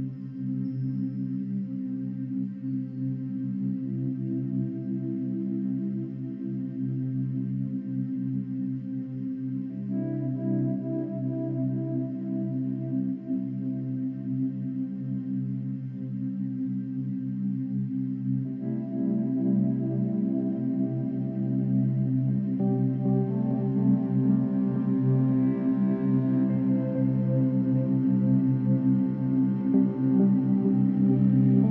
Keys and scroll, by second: 5.1 ], 7.7 space, 10.3 space, 19.0 space.